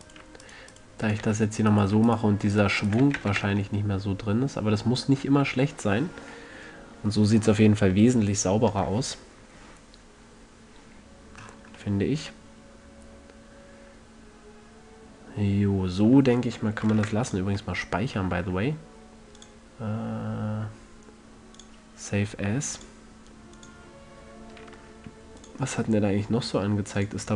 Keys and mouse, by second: 0.1 f, 1.6 f, 3.4 f, 3.6 a, 3.8 Tab, 13.2 middle click, 13.8-14.3 middle drag, 17.3 ctrl+s, 20.5-20.8 drag.